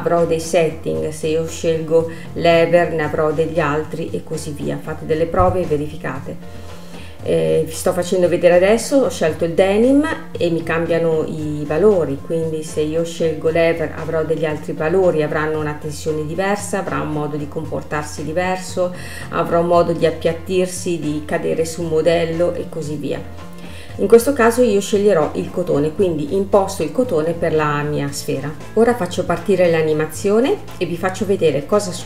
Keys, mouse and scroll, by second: 3.2-6.2 drag, 9.0-14.7 drag, 19.5-22.5 drag, 23.9-25.0 scroll down 1, 25.0-25.5 scroll down 1, 25.5-26.0 scroll up 3, 26.5-26.9 scroll up 7.